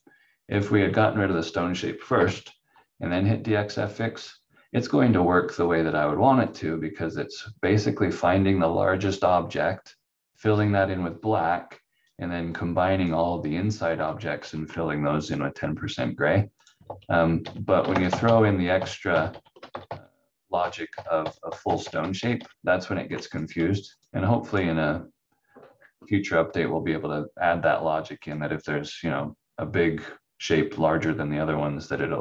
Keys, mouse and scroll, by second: 2.1 Delete, 3.9 click, 4.8-5.1 scroll up 1, 6.5 click, 11.5 click, 13.9 ctrl+z, 14.4 ctrl+z, 15.2 click, 16.8 ctrl+z, 17.4 ctrl+z, 17.9 ctrl+shift+z, 18.0 ctrl+shift+z, 18.2 ctrl+shift+z, 18.7 ctrl+shift+z, 19.0 ctrl+shift+z, 19.7 ctrl+z, 19.8 ctrl+z, 19.9 ctrl+z, 20.1 ctrl+z, 20.5 ctrl+z, 21.2 ctrl+z, 21.4 ctrl+z, 21.6 ctrl+z, 21.8 ctrl+z, 21.9 ctrl+z, 22.1 ctrl+z, 24.0 click, 28.2 click.